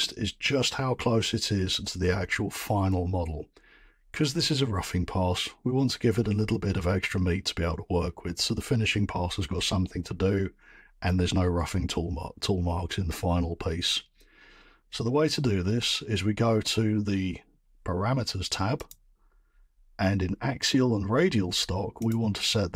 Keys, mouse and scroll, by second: 18.9 click, 22.1 click.